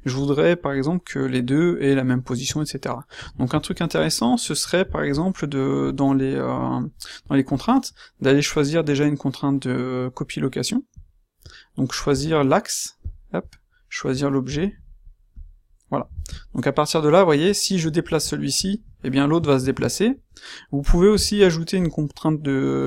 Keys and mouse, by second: 11.0-16.4 middle drag, 17.8-18.8 middle drag, 19.5 ctrl+z.